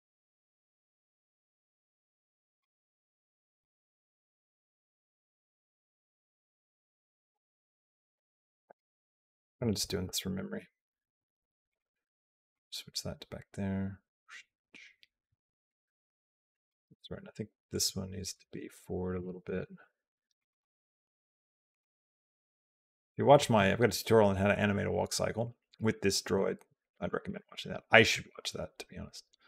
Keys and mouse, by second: 0.8 a, 1.6 click, 3.1 click, 3.4 g, 5.4-8.6 drag, 9.1 click, 9.6 g, 12.4-16.5 drag, 17.5 click, 18.1 g, 19.4 g, 20.4 g, 27.1 click, 27.9-29.4 drag.